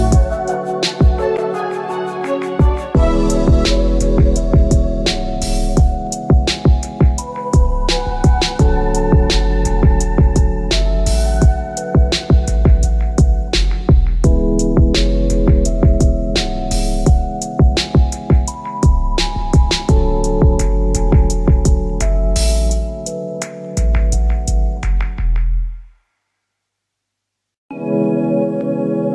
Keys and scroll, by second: 3.2 Return.